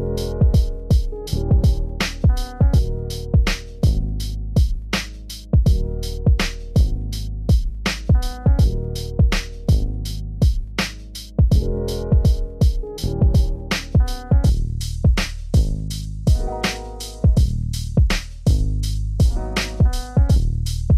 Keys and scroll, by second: 0.3 ctrl+alt+s.